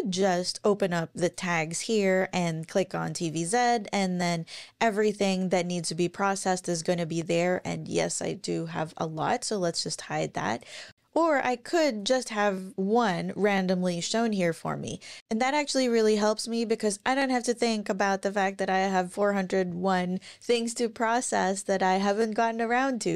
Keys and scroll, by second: 7.4 ctrl+super+r, 17.8 ctrl+super+r.